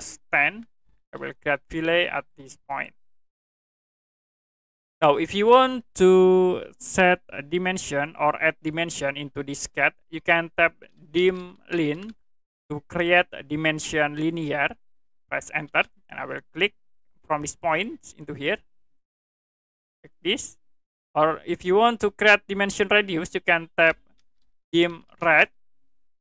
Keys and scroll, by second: 0.0-1.0 typing, 11.1-12.4 typing, 15.6 space, 23.9-25.9 typing.